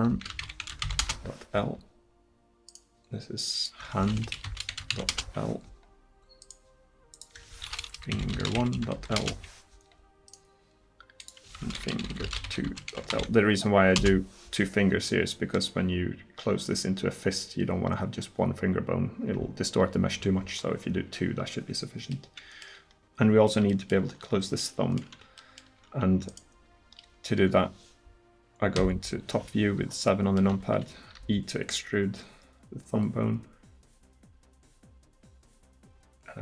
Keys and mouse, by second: 2.7-5.5 drag, 6.4 click, 10.3 click, 22.1 middle click, 26.3-27.6 right drag, 28.8 KP_7, 30.1 middle click, 31.2 e.